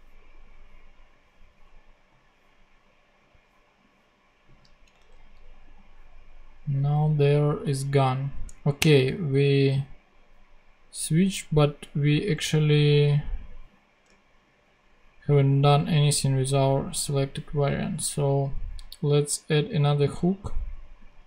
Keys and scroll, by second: 4.9 ctrl+Tab.